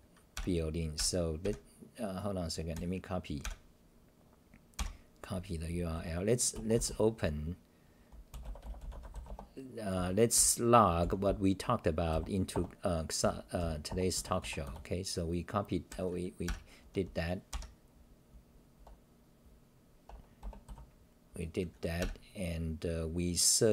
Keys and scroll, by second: 0.0-12.0 typing, 9.3 Return, 12.5 Return, 13.2-15.1 typing, 13.9 Return, 20.4 Return, 20.6 k.